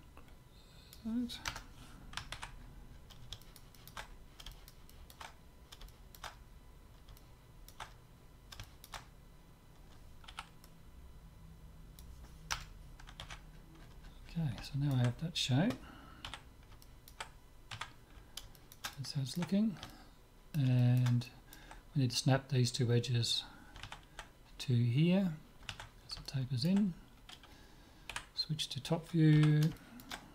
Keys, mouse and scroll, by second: 2.3 ctrl+x, 2.6 middle click, 3.6-6.4 middle drag, 6.7-11.2 middle drag, 10.4 c, 13.2 ctrl+x, 13.5-23.0 middle drag, 16.4 z, 17.7 Tab, 26.2-28.2 middle drag, 28.2 KP_7, 29.4 z, 29.8 middle click.